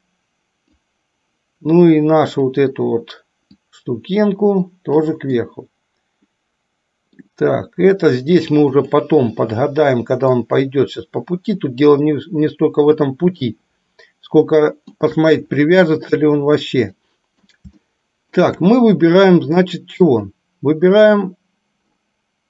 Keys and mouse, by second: 2.5 click, 3.8-5.1 drag, 5.5-7.3 middle drag, 8.8 click, 10.4-13.3 drag, 13.7-15.3 shift+middle drag, 17.1 middle click, 18.1 shift+middle click, 20.3 click.